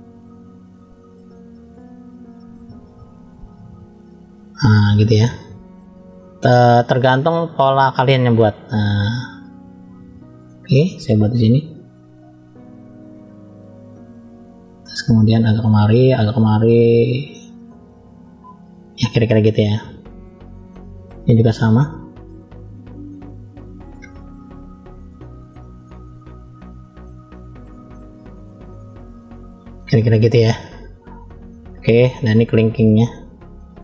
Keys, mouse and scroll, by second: 4.6-6.1 scroll down 2, 7.4-8.0 drag, 9.3-10.2 scroll up 5, 10.5 shift+middle click, 11.7 click, 18.8-19.7 scroll down 4, 19.9 shift+middle click, 21.4 scroll up 2, 22.2 shift+middle click, 26.0 click, 30.4 scroll down 1, 31.3 shift+middle click, 31.3 scroll down 1, 32.4-32.8 scroll up 3, 33.1 shift+middle click.